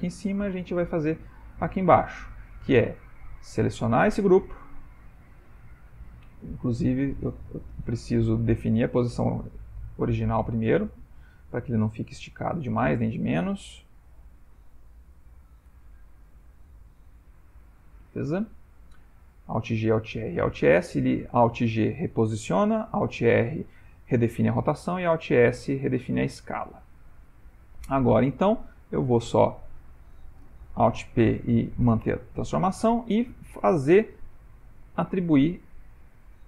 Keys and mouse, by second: 0.1 shift+middle click, 1.0 shift+middle click, 1.5 middle click, 2.9 click, 3.5 middle click, 6.1 ctrl+middle click, 6.7 click, 7.9 ctrl+Tab, 8.3 click, 10.0 alt+g, 10.9 middle click, 12.3 shift+middle click, 13.7 a, 14.0 a, 14.3 a, 15.4 alt+g, 15.7 alt+r, 15.8 alt+e, 17.2 alt+s, 18.0-19.1 middle click, 18.9 middle click, 19.6 middle click, 25.1 shift+middle click, 25.8 ctrl+middle click, 25.9 ctrl+middle click, 26.1 shift+middle click, 26.2 middle click, 27.1 ctrl+middle click, 27.5 middle click, 28.7 click, 29.4 click, 30.9 alt+p, 33.3 middle click, 35.7 shift+click.